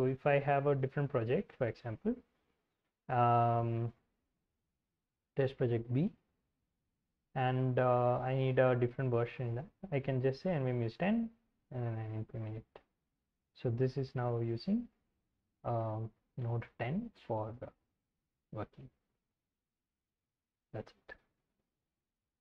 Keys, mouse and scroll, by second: 0.0-7.1 typing, 7.1 alt+., 7.4 Return, 8.7-14.6 typing, 18.4-19.9 typing.